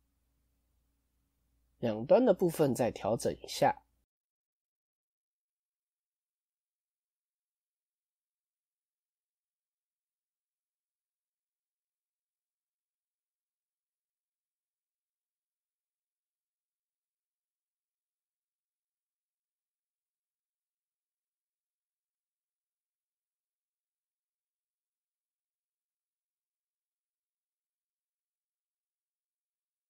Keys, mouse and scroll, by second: 3.0-4.0 scroll down 1, 4.0 click, 6.0-7.1 drag, 8.9-9.4 scroll up 3, 9.4-11.0 scroll down 1, 11.0 alt+shift+click, 12.5-12.8 scroll down 1, 13.0 shift+click, 15.8 scroll up 1, 17.2-18.2 scroll up 1, 18.2-20.4 middle drag, 20.4-21.2 scroll down 1, 21.2 click, 21.9 alt+click, 22.8 middle click, 23.6-24.0 scroll up 1, 24.0-25.1 middle drag, 25.1 alt+shift+click, 25.5 scroll down 1, 25.6 scroll up 1, 25.6-26.9 middle drag, 26.9 alt+shift+click, 27.6-28.8 middle drag, 28.8 alt+shift+click.